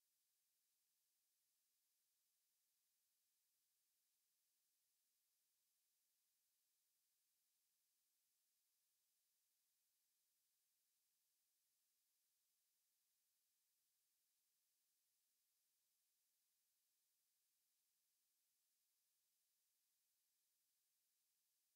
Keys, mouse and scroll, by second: 1.6 KP_0, 7.7-12.4 middle drag, 19.1-20.8 middle drag.